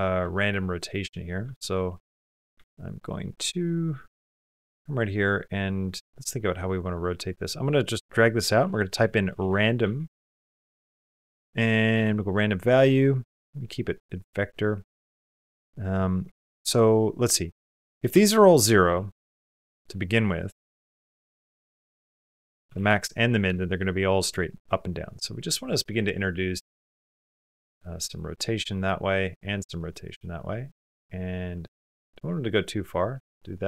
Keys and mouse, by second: 0.1 shift+click, 0.4 click, 1.3 shift+click, 2.4 alt+a, 2.9 middle click, 3.4 middle click, 6.7-9.2 drag, 10.4 BackSpace, 12.7 click, 13.0 typing, 13.7 click, 15.0-19.6 drag, 19.6 KP_Decimal, 20.7 click, 21.5-22.5 drag, 23.5 shift+middle click, 24.2 shift+middle click, 25.5-27.9 drag, 28.6 click, 29.2 middle click, 30.5 middle click, 31.1 click, 32.0 middle click, 32.8 click.